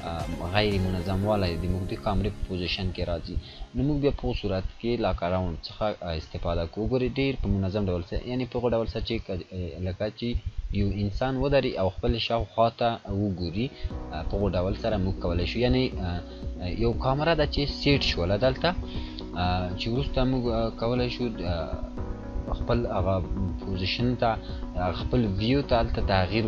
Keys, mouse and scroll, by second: 21.2-22.0 scroll up 1, 22.4-22.9 drag.